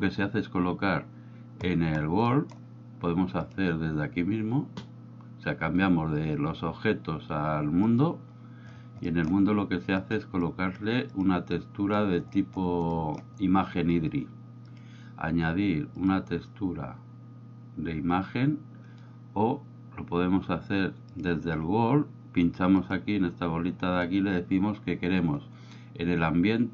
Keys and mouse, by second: 2.3 middle click, 3.5-8.2 drag, 9.3 middle click, 10.0 click, 10.4-10.8 drag, 11.1 click, 11.6 click, 13.1 middle click, 14.7-19.0 drag, 21.2 click, 22.9-26.7 drag.